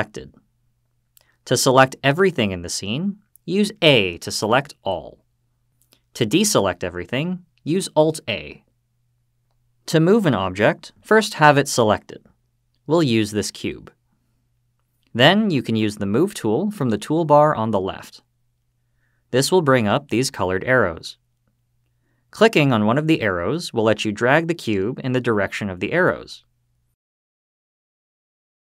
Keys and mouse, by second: 4.9 a, 8.7 alt+a, 12.3 click, 17.6 click, 26.7-27.3 drag, 28.1-28.6 drag.